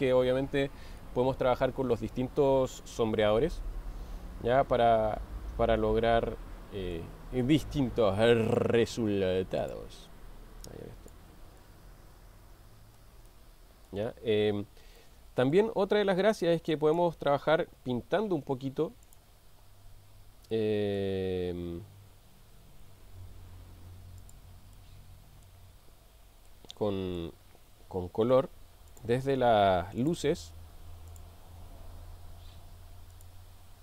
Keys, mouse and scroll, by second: 1.0-3.1 middle drag, 3.5-7.2 middle drag, 9.6 click, 11.6-13.2 middle drag, 13.6 middle click, 15.0-15.8 middle drag, 16.8-17.3 drag, 18.2 g, 19.1 click, 20.5-21.0 middle drag, 22.8 r, 24.3-24.6 drag, 24.8-25.7 middle drag, 26.5 middle click, 31.1 click, 33.1-33.8 drag.